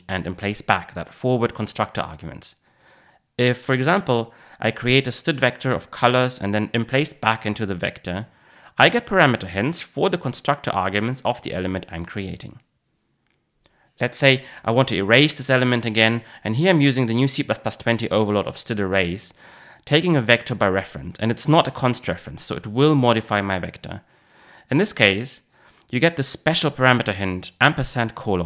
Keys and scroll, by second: 8.9 Return, 18.5 Return.